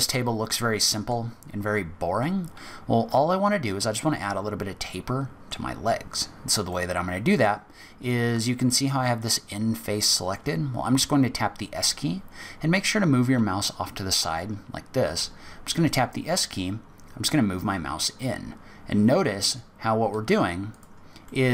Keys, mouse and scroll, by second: 0.1 middle click, 0.1-1.3 scroll down 2, 1.5-2.2 scroll up 2, 2.8-5.8 scroll up 2, 3.1 middle click, 6.7 middle click, 15.0 s, 21.2 middle click.